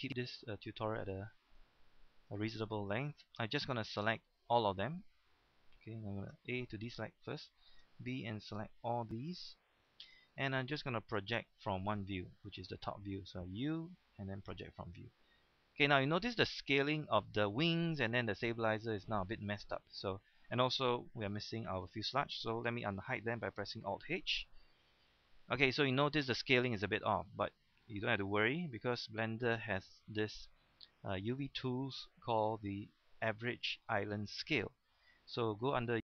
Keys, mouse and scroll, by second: 2.0-2.3 scroll up 1, 3.0-3.7 scroll down 1, 5.7 shift+middle click, 6.3 a, 7.8 b, 8.5-10.2 drag, 10.2 scroll up 1, 11.3 shift+middle click, 11.6-12.0 scroll up 1, 12.4 shift+middle click, 13.5 u, 14.3 click, 15.2 scroll down 1, 16.1 scroll up 1, 18.3 shift+middle click, 19.7 scroll down 1, 19.9-20.2 scroll up 1, 20.2-20.9 scroll down 1, 21.3 shift+middle click, 21.5 scroll down 1, 21.9 shift+middle click, 22.3-23.7 scroll down 1, 24.1 alt+h, 24.9-26.0 scroll down 1, 26.5-27.1 scroll up 1, 27.1-28.0 scroll down 1, 28.6 a, 28.9 a, 30.9 click.